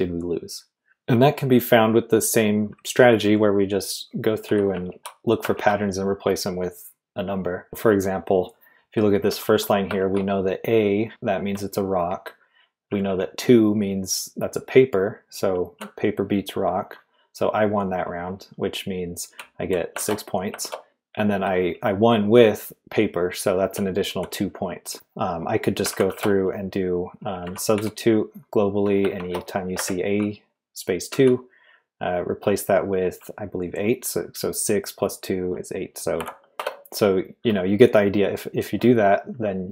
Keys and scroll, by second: 0.6-1.3 typing, 4.4 j, 4.9 shift+v, 5.5 shift+v, 9.4 shift+v, 10.0 shift+v, 12.6-13.5 typing, 19.1-21.7 typing, 23.7-27.7 typing, 29.1 shift+a, 29.6 space, 29.7 2, 31.1 /, 36.1 8, 36.5 Right, 36.6 Return.